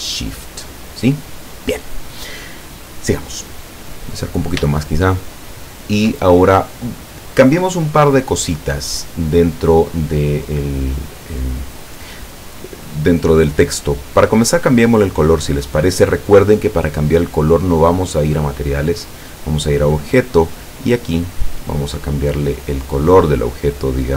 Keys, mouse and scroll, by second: 4.0 scroll up 1, 4.8 shift+scroll up 1, 4.8-6.1 shift+middle drag, 14.6 click, 17.9 click, 19.2 click, 19.9-20.3 scroll down 1, 21.4 click.